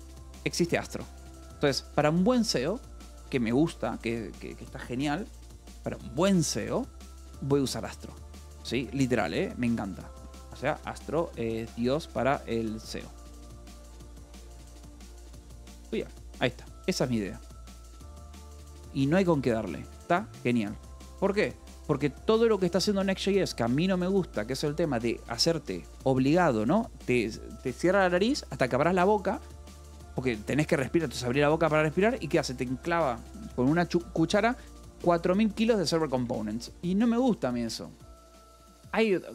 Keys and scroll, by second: 0.3-1.6 typing, 8.4 :, 8.7 Escape, 9.6-14.1 typing, 15.0 Escape, 15.5 a, 15.8 BackSpace, 15.9 Escape, 17.5 o, 21.8 =, 22.2 space.